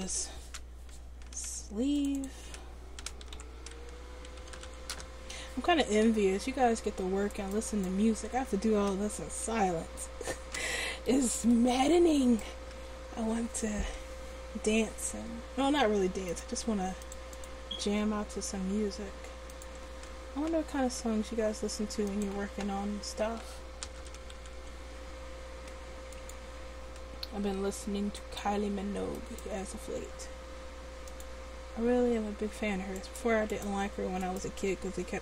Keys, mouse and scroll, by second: 2.0-7.4 drag, 12.7 Tab, 18.0 Tab, 24.2 e, 27.6 2.